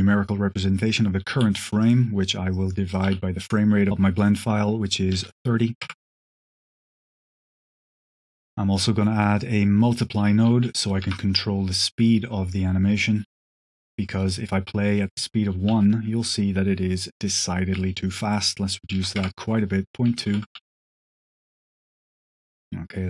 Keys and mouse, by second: 1.2 q, 2.8 click, 3.4-6.1 drag, 6.2 click, 6.5 click, 7.0 g, 7.5 g, 7.9 click, 8.1 q, 9.9 click, 10.7 click, 11.8 click, 12.1 click, 12.9 click, 13.3 ctrl+x, 13.3 drag, 13.6 click, 15.1 click, 15.6 space, 17.6 space, 18.1-19.4 drag, 20.2 shift+Left, 20.4 space.